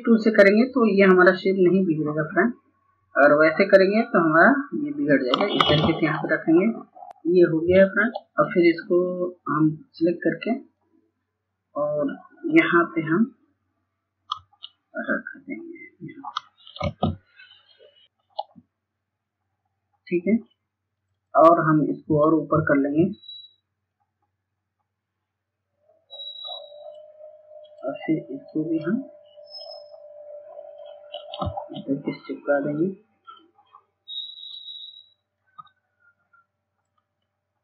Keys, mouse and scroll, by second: 5.7 ctrl+space, 6.2-15.9 drag, 16.3 ctrl+space, 17.2-30.7 drag, 32.6-37.6 drag.